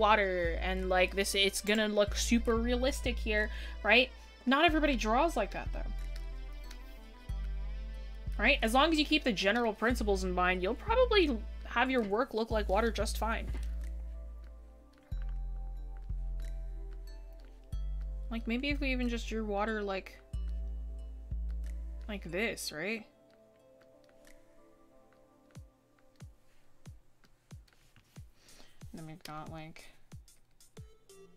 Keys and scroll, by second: 15.6 ctrl+z, 18.8 ctrl+z.